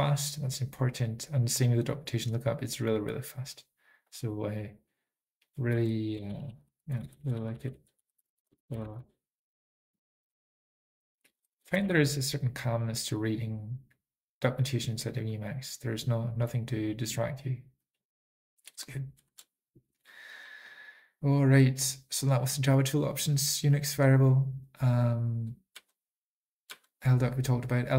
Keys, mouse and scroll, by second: 3.6 super+click, 4.3 ctrl+a, 4.3 ctrl+n, 4.3 Return, 4.3 alt+x, 4.3 super+click, 4.3 scroll up 2, 4.3 typing, 6.6 alt+x, 6.6 ctrl+g, 6.6 ctrl+p, 6.7 ctrl+p, 8.0 alt+f, 8.0 alt+b, 8.4-9.5 typing, 9.0 super+click, 11.4 Return, 11.4 ctrl+n, 11.5 ctrl+n, 17.1 typing.